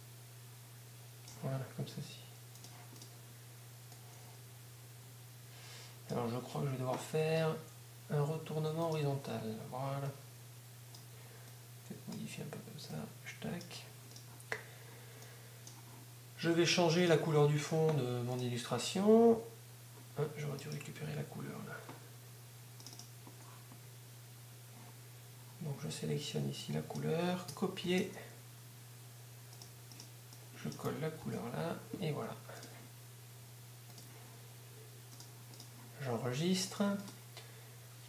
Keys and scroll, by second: 27.5 Up, 32.2 v.